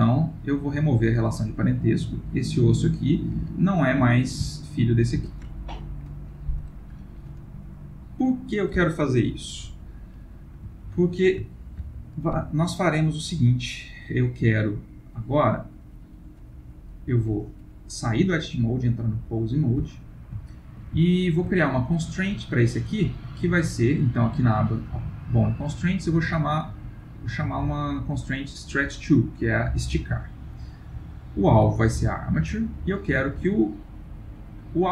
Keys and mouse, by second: 0.9 g, 4.0 click, 4.3 g, 10.9 ctrl+middle click, 11.5 shift+middle click, 12.6 middle click, 15.1 middle click, 18.3 click, 20.5 ctrl+middle click, 21.2 shift+middle click, 21.3 shift+middle click, 22.4 click, 24.3 click, 30.8 click.